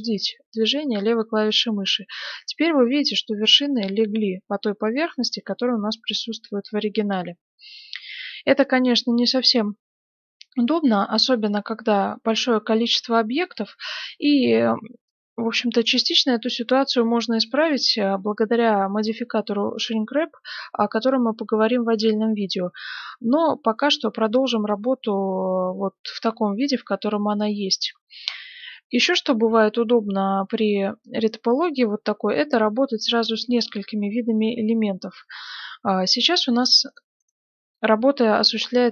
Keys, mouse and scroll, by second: 1.0-6.8 middle drag, 9.5-12.4 middle drag, 13.2-19.5 middle drag, 21.6-24.9 middle drag, 25.5-27.4 middle drag, 27.6-29.5 middle drag, 36.8-38.9 right drag.